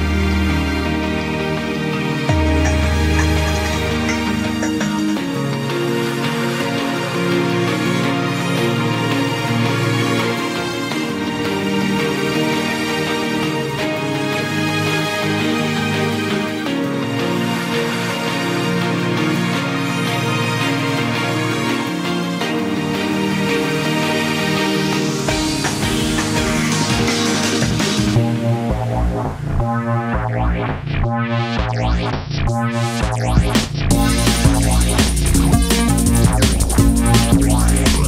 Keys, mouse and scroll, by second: 0.1 middle click, 0.3 scroll down 2, 0.4 middle drag, 0.6 click, 1.0 middle click, 1.3 shift+click, 1.5 middle click, 1.8-2.2 scroll up 2, 2.2 ctrl+b, 4.2 click, 5.0 i, 6.4 e, 7.3 x, 7.7 scroll up 1, 8.1 2, 8.3 drag, 8.9 ctrl+b, 10.9 Tab, 11.1 scroll down 1, 11.2 middle click, 11.6 KP_Divide, 12.4 scroll up 1, 12.6-12.9 scroll down 1, 12.9 right click, 13.7-14.3 scroll up 1, 14.3 Tab, 15.0 click, 15.5 1, 16.8 click, 16.9-17.4 scroll up 2, 17.4 g, 19.6 Tab, 19.8-20.1 scroll down 2, 20.1-21.1 middle drag, 21.1 click, 21.3-22.1 scroll down 4, 21.3-21.6 middle drag, 22.1 KP_1, 22.4 scroll down 1, 22.6-23.1 scroll up 1, 23.1 click, 23.2-23.8 scroll up 4, 23.8 Tab, 24.1-24.8 scroll up 1, 24.8 click, 25.7 click, 26.5 ctrl+r, 28.7 2, 29.2 KP_Decimal, 29.7-30.5 scroll up 4, 30.5 ctrl+b, 32.9 3, 33.1 scroll down 5, 33.3 middle click, 33.7-34.2 scroll up 3, 34.2-34.9 middle drag, 34.9 e, 35.3 s, 37.6 e, 37.8 s.